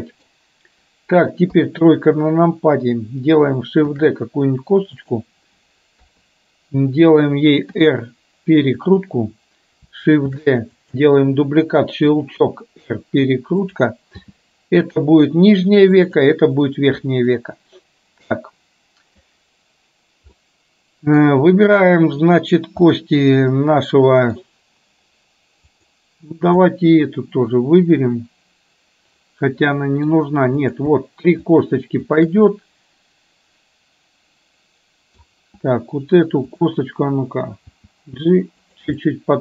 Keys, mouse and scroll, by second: 1.6 KP_3, 4.0 shift+d, 6.0 KP_3, 7.7 r, 10.5 shift+d, 12.1 r, 14.3 g, 17.5-19.2 middle drag, 20.5 middle click, 23.0-24.6 middle drag, 25.8 click, 26.7-30.2 middle drag, 30.6 click, 32.2 shift+click, 32.6-35.2 middle drag, 39.0-39.4 middle drag.